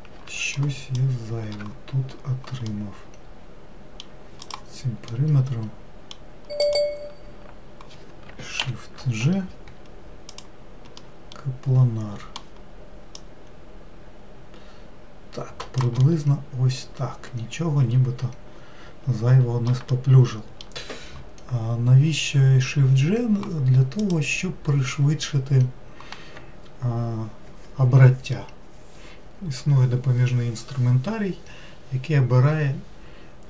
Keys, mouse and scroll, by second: 2.7-4.5 middle drag, 4.5 click, 5.1-6.6 middle drag, 6.6 click, 8.7 shift+g, 11.1-13.2 middle drag, 13.2 click, 16.1-19.1 middle drag, 19.9-23.0 shift+middle drag, 24.1-27.2 drag.